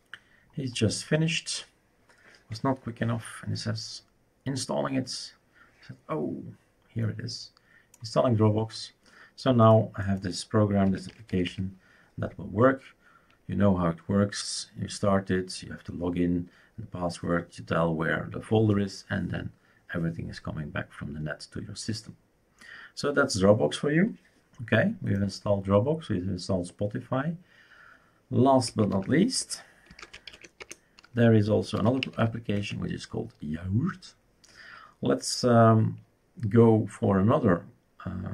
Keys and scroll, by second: 10.6-11.9 typing, 28.6-32.6 typing.